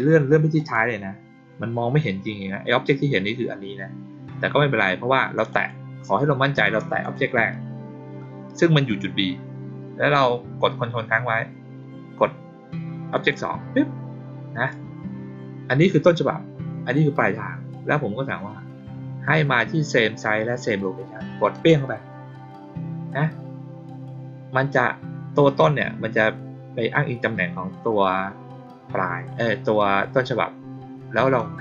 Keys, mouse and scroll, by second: 0.5 click, 5.4 click, 6.5 click, 6.9 click, 13.1 ctrl+click, 21.4 click, 31.3-31.6 drag.